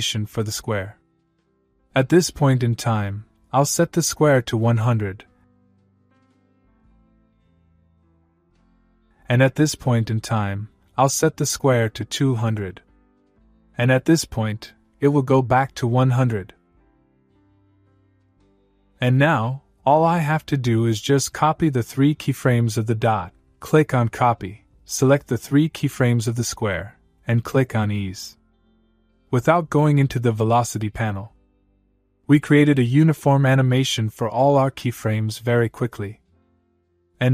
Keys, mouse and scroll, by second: 5.3 shift+s, 7.5 click, 11.6 click, 14.8-15.6 click, 17.5 click, 20.2-21.6 click, 25.3-26.5 click, 29.4-34.5 click, 34.4 space.